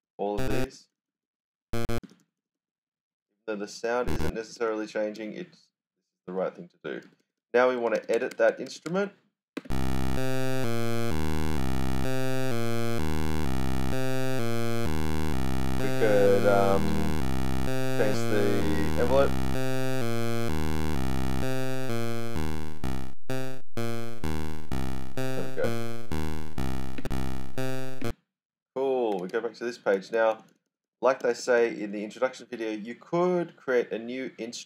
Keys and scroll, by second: 0.0-1.3 typing, 3.7-7.7 typing, 9.5 space, 10.5-11.5 typing, 12.8-14.6 typing, 20.4-23.3 typing, 26.9 space, 28.8-31.3 typing.